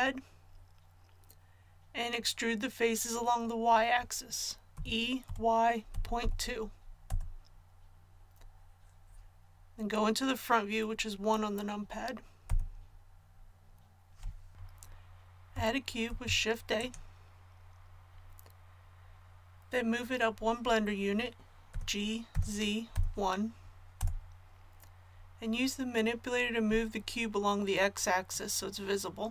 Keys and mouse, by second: 4.7 e, 12.4 KP_1, 16.0 shift+a, 21.7 g, 28.3-29.3 drag.